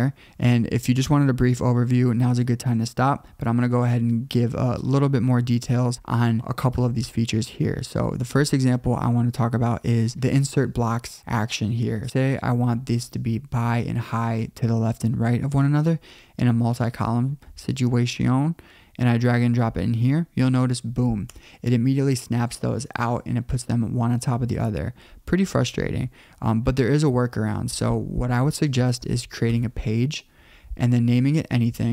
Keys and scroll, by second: 25.6 super+z, 29.5 Return.